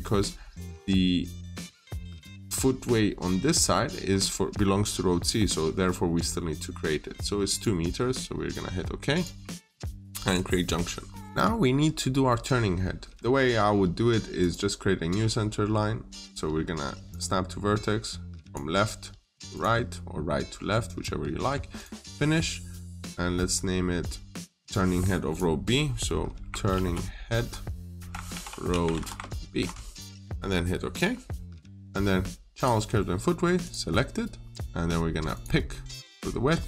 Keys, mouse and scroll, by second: 4.0-4.5 scroll down 1, 7.4 click, 10.7-11.0 scroll down 1, 11.2 middle click, 11.5-13.1 scroll up 1, 13.1 click, 14.9-16.4 scroll up 1, 16.9 click, 20.7 right click, 21.6 click, 26.6-29.4 typing, 30.8 click.